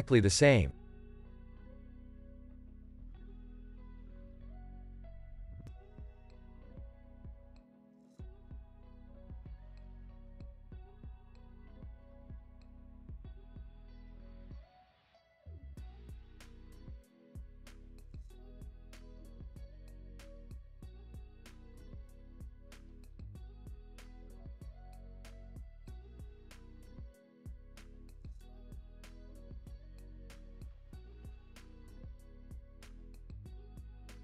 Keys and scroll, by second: 1.1 Tab, 6.5 super+s, 9.2 space, 10.8 space, 18.9 space, 23.2 space, 23.6 super+s, 24.8 space, 27.2 space, 27.9 super+s.